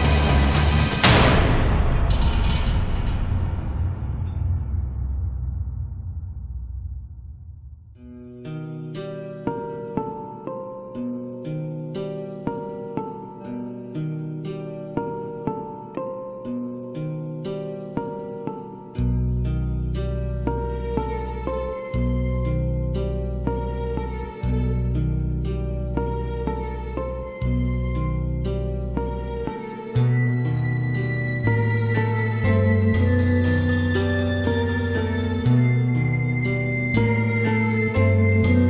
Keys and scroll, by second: 35.3 space, 38.3 ctrl+=.